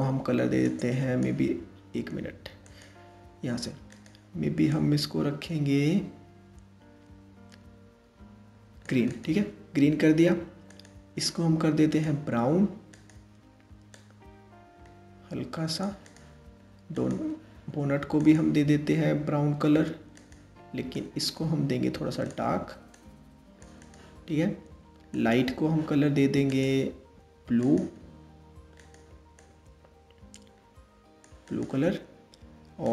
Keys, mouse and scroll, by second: 2.5 click, 3.5 click, 10.3 click, 11.5-12.7 drag, 15.7-16.7 drag, 17.8-19.9 drag, 24.7 click, 26.1-27.4 drag, 28.4 click, 32.4 click.